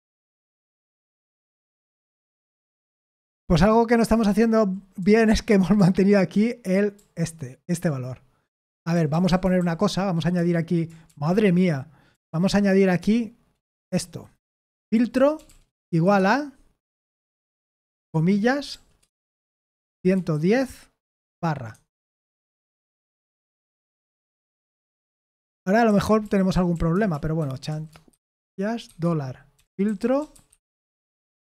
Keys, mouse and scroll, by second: 0.3 ctrl+p, 1.4 Return, 3.6-5.7 typing, 6.9-9.1 typing, 10.3-11.1 typing, 12.1 BackSpace, 13.0 Return, 14.0 Down, 14.3-16.4 typing, 18.1 typing, 19.2-20.6 typing, 21.7 Escape, 25.6-31.5 typing.